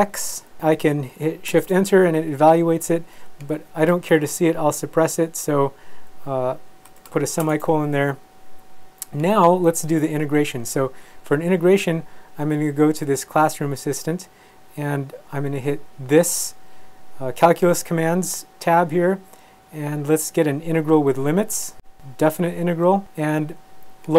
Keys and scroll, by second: 0.2 Right, 1.5 shift+Return, 6.9 ;, 7.4 shift+Return.